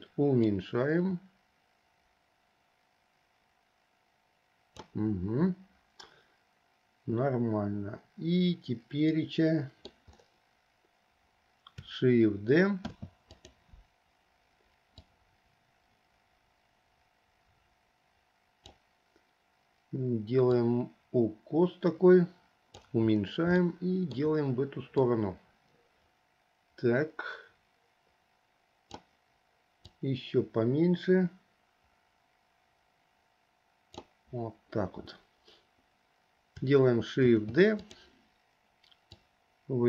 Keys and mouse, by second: 0.6 click, 1.4-5.0 drag, 9.4 middle click, 13.0 shift+d, 15.1-18.9 drag, 20.7-23.1 drag, 23.9 shift+middle click, 25.2-29.2 drag, 30.0-34.2 drag, 37.5 shift+d, 39.3-39.8 drag.